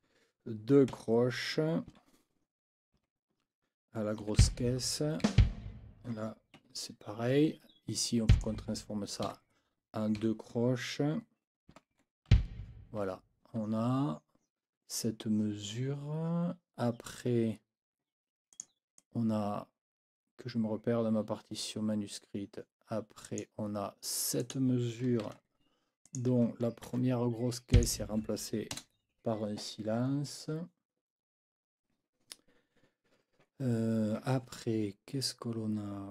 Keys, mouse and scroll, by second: 0.9 KP_4, 1.9 Right, 3.0 n, 4.2 KP_4, 4.4 b, 5.2 Right, 6.6 Escape, 8.3 click, 9.2 KP_4, 10.2 Right, 11.7 n, 11.9 KP_4, 12.3 b, 13.0 Escape, 18.5 click, 19.0-23.6 drag, 24.4 click, 25.2 ctrl+c, 26.0 click, 26.8 ctrl+v, 27.7 click, 28.7 KP_0.